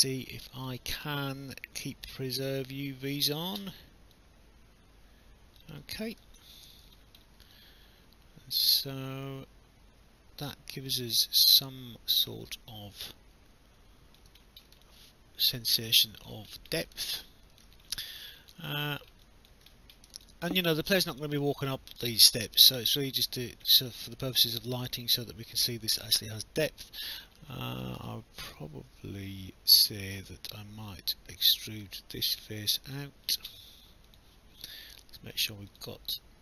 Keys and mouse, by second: 0.4 click, 2.1 click, 4.2 click, 6.4 alt+click, 14.8 alt+click, 17.0 alt+click, 18.3 alt+click, 18.7 alt+middle click, 19.3 alt+click, 20.3 alt+click, 22.1 alt+click, 23.2 alt+click, 24.8 alt+click, 28.1 alt+click, 32.2 click, 32.7 alt+click, 34.1 click, 35.7 click.